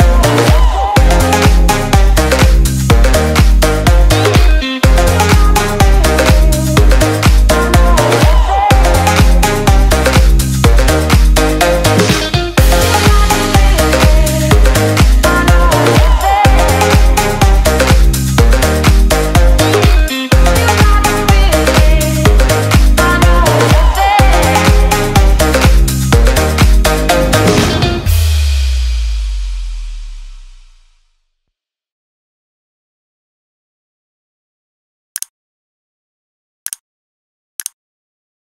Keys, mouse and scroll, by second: 4.4 click, 8.0 click, 12.1 click.